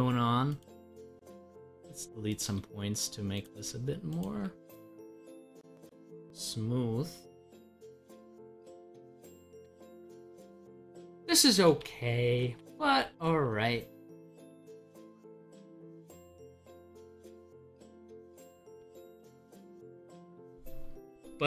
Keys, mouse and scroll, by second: 0.6 Delete, 1.5 scroll down 1, 2.4 Delete, 3.3 click, 3.6 Delete, 4.1 click, 4.2 Delete, 5.8 click, 6.3 scroll down 1, 7.9 scroll up 1, 8.7 scroll down 1, 20.9-21.4 scroll up 1.